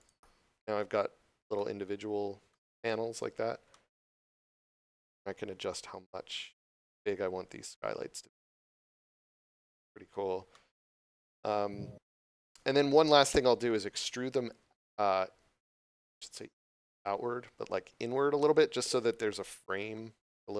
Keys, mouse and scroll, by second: 1.4 middle click, 5.6 click, 9.6 middle click, 12.1 scroll up 1, 12.3 middle click, 15.8 middle click, 18.3 middle click.